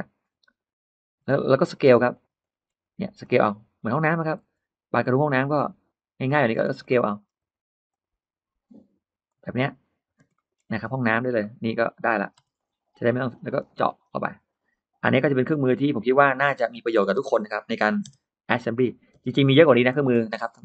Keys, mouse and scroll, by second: 0.2 click, 1.0 middle click, 1.0-1.3 scroll down 1, 1.1 space, 1.3-2.0 scroll up 1, 2.0 click, 2.2 middle click, 3.1 middle click, 4.3 s, 6.4 space, 6.7 middle click, 7.1 scroll up 1, 7.2 space, 9.1 click, 10.1 space, 10.2 middle click, 10.4-10.7 scroll down 1, 11.2 middle click, 11.5 middle click, 12.3 m, 12.4 click, 13.0 click, 13.5 space, 13.7 click, 13.8 click, 14.0 click, 14.7 middle click, 15.1 r, 15.8 click, 16.1-16.4 scroll up 1, 17.0 click, 17.9 p, 18.4 click, 18.5 click, 19.0 middle click, 19.0 space, 19.4 middle click, 19.5 Escape, 19.7-20.6 scroll down 5, 20.2 middle click.